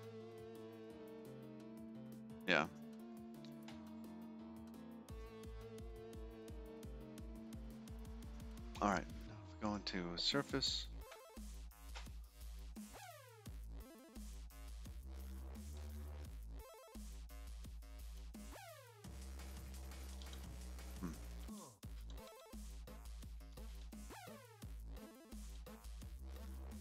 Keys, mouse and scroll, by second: 2.8-3.2 scroll down 4, 3.6-4.0 scroll down 4, 5.4 middle click, 6.4-7.5 scroll up 8, 7.5 middle click, 8.8 scroll down 5, 9.4 scroll down 5, 10.2 click, 13.6 Tab, 13.9 click, 16.3 1, 17.2 1, 18.5 2, 19.1 3, 20.1 1, 20.8 2, 22.2 2, 22.6 3, 22.8 1, 24.1 1, 24.3 2, 26.1-26.8 typing.